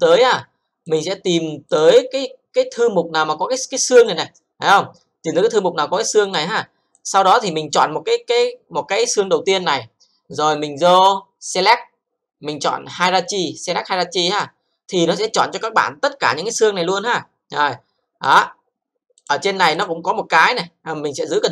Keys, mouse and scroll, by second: 0.8 click, 1.7 click, 3.9 click, 6.2 click, 6.9 click, 11.5 click, 14.3 click, 19.1 click, 19.1 click, 19.7 click.